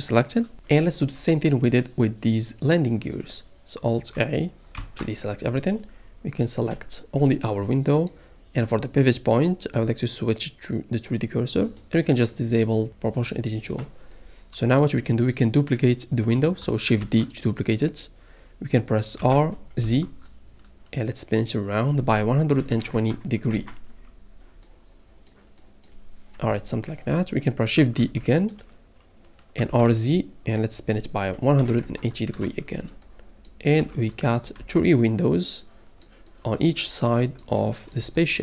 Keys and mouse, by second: 4.8 alt+a, 6.7 l, 7.2 l, 9.8-11.8 drag, 13.6 click, 17.0 shift+d, 19.2 r, 19.8 z, 22.6 KP_1, 22.6 KP_2, 22.9 KP_0, 23.5 KP_Enter, 26.5 KP_7, 28.0 shift+d, 28.5-29.5 drag, 29.6 r, 29.7 z, 31.5 KP_1, 31.6 KP_2, 31.8 KP_0, 32.3 KP_Enter, 33.8 Tab, 34.6 alt+a, 37.2-37.8 middle drag, 38.0 shift+middle drag.